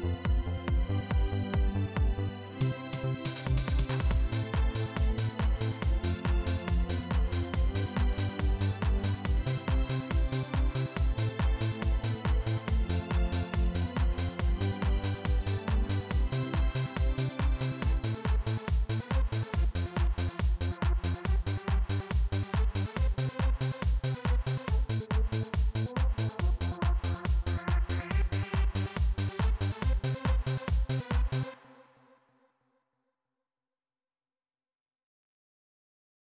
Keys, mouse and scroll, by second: 0.4 right click, 2.2 click, 3.1-4.9 drag, 5.4 right click, 5.8 click, 6.4 right click, 8.3 click, 9.9-11.0 drag, 11.2 click, 11.8 right click, 13.5 click, 15.8-16.6 drag, 18.1 click, 19.6-20.5 drag, 21.5 click, 23.0-23.8 drag, 25.1 click, 28.1-29.8 drag, 30.2 click, 31.3 click, 32.6 click, 33.6-34.5 drag, 34.8 click, 35.5-36.2 drag.